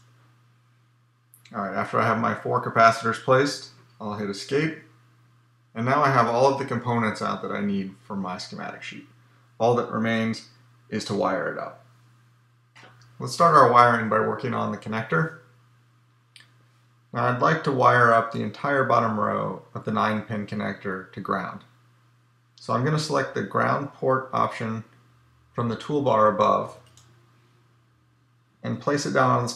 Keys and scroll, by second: 4.6 Escape.